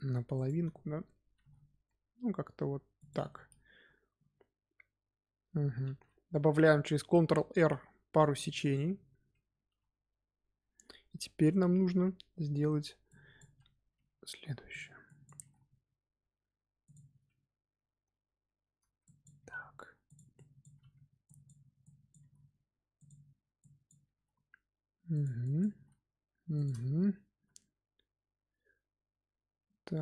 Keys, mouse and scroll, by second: 1.3 g, 5.9 ctrl+r, 13.0 click, 13.8 g, 15.0 click, 15.3 g, 19.0 click, 19.3 g, 20.3 click, 20.7 g, 21.8 click, 22.1 g, 23.5 click, 24.1 g, 25.4 click, 25.7 g, 26.8 Tab, 27.0 scroll down 2, 27.3 z, 27.5-30.0 middle drag.